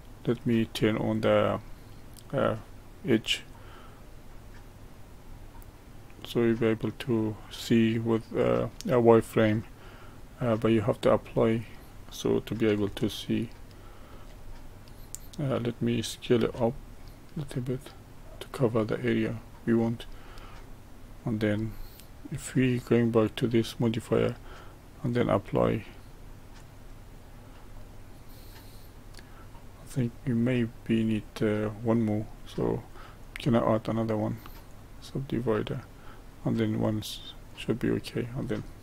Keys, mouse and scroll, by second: 4.9 click, 9.1 click, 10.0-11.5 middle drag, 11.5-12.9 scroll up 1, 12.9-16.1 shift+middle drag, 16.4 s, 20.1-23.1 middle drag, 23.2 click, 25.0-27.7 drag, 27.7-30.7 middle drag, 31.0-33.0 middle drag, 33.0-36.0 drag, 37.3-38.8 drag.